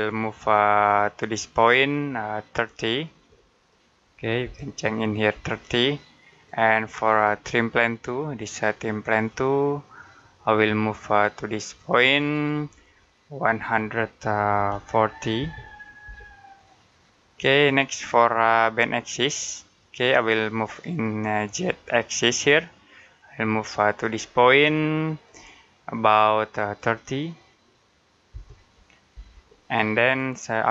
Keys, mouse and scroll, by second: 0.7 click, 4.3-5.2 typing, 6.1 click, 6.8 scroll down 1, 6.9-7.3 scroll up 1, 8.4 click, 14.4-15.9 typing, 17.2 click, 18.3 middle click, 21.4 click, 28.8-29.5 typing, 29.9 click.